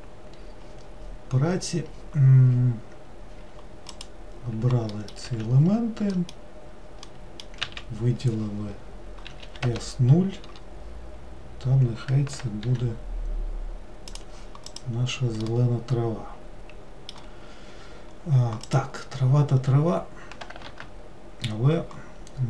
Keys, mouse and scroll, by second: 0.0 click, 4.1 click, 5.2 middle click, 5.4 a, 9.4 s, 12.8 g, 14.9 click, 15.6-18.9 middle drag, 18.9 click.